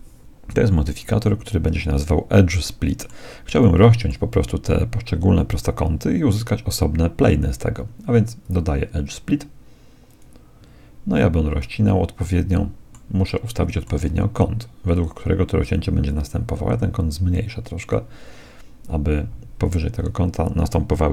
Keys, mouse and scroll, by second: 1.5-3.3 middle drag, 3.7-5.5 middle drag, 8.4-10.4 drag, 11.6-15.0 middle drag, 16.1-18.0 drag.